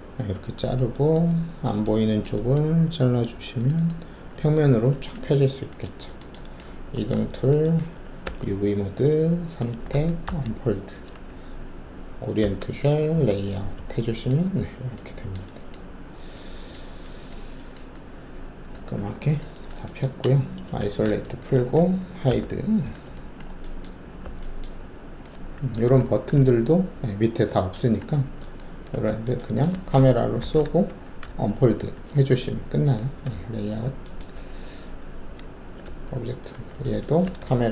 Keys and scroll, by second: 6.9 alt+w, 8.2 alt+4, 10.2 d, 12.4 a, 13.1 z, 18.9 alt+`, 20.8 alt+shift+a, 22.2 h, 25.8 alt+f, 30.4 ctrl+alt+shift+c, 31.2 d, 33.2 alt+z, 34.3 alt+`, 35.1 w, 35.8 alt+`.